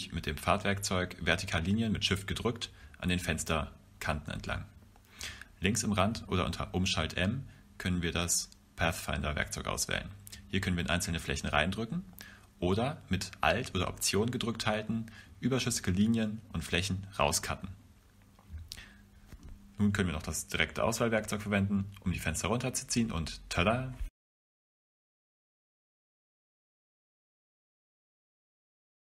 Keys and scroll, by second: 0.7 Return, 1.8 Return, 3.1 Return, 4.9 Return, 5.5 v.